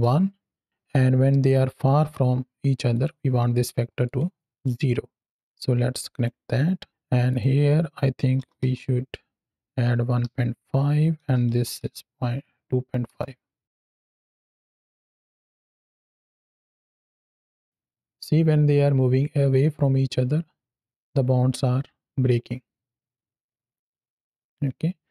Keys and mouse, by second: 2.8 click, 3.9 click, 5.3 click, 7.2-13.0 drag, 13.6 shift+Left, 13.7 space, 17.1 space.